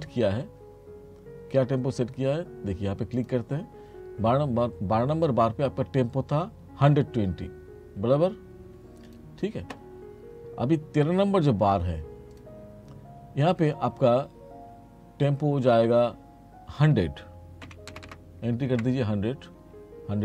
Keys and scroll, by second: 17.7 1, 18.8 Return.